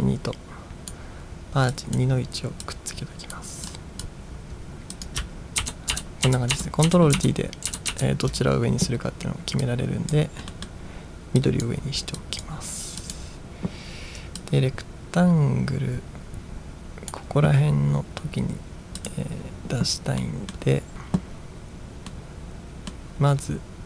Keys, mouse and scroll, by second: 1.8-2.2 drag, 2.7-5.2 drag, 5.6 ctrl+t, 6.3 ctrl+t, 6.6 ctrl+t, 7.2 ctrl+t, 7.8 ctrl+t, 8.0 ctrl+t, 9.7-10.3 drag, 10.7 middle drag, 11.5-11.8 drag, 12.2 click, 13.2 click, 14.6-17.1 drag, 19.0 click, 20.3 middle click, 22.3-23.0 middle drag.